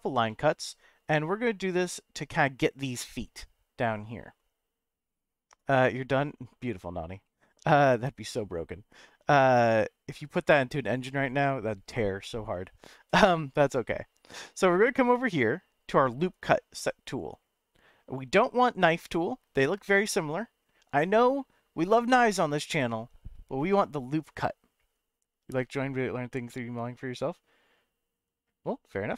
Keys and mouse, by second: 0.3 middle click, 7.3-8.3 middle drag.